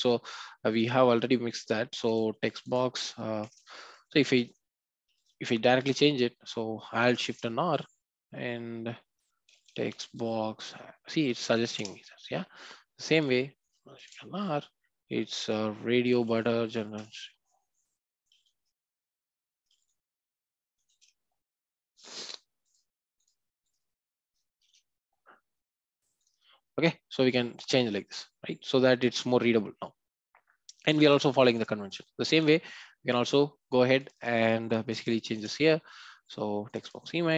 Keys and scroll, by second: 5.1 ctrl+z, 5.7 ctrl+z, 11.8 Return, 18.3 ctrl+z, 21.0 shift+F6, 24.6 shift+F6, 35.2 shift+F6.